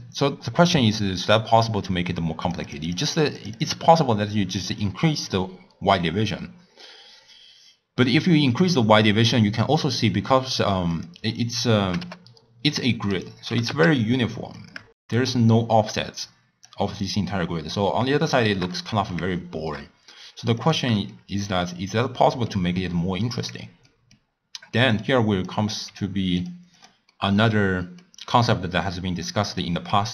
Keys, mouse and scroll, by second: 2.4-3.7 drag, 4.2-4.8 scroll down 2, 4.8-9.8 middle drag, 10.0-10.9 scroll down 2, 10.9 click, 11.8 g, 13.5 g, 14.8-16.9 drag, 17.4-20.6 middle drag, 20.6 click, 21.1-23.4 shift+middle drag, 23.4-23.9 scroll down 1, 23.9-24.3 middle drag, 24.3-24.9 scroll up 1, 24.9 click, 25.8 g, 26.7 drag, 27.1-28.9 middle drag, 28.9 click.